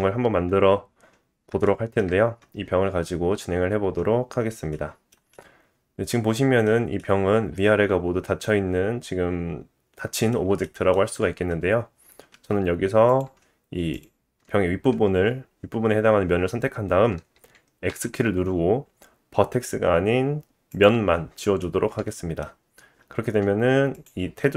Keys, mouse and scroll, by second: 1.0-2.0 drag, 1.6 shift+middle click, 5.3 middle click, 7.0 middle click, 7.4 shift+middle click, 10.6 shift+middle click, 11.2-11.5 scroll up 1, 11.8-12.3 scroll down 1, 12.3 Tab, 13.1 click, 13.9 alt+click, 15.3-17.0 drag, 17.9 x, 21.6 middle click, 23.0-23.7 scroll up 2, 23.9 alt+click.